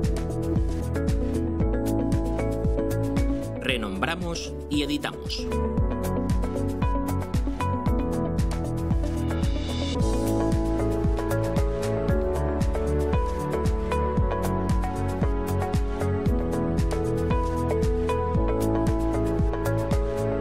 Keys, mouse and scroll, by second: 1.7 click, 3.6 F2, 4.5 Right, 5.2 BackSpace, 7.9 o, 8.2 a, 8.9 -, 11.2-12.4 typing, 13.3 Return, 15.6 click, 17.6-18.1 scroll up 2, 18.7 scroll down 1, 19.3 click.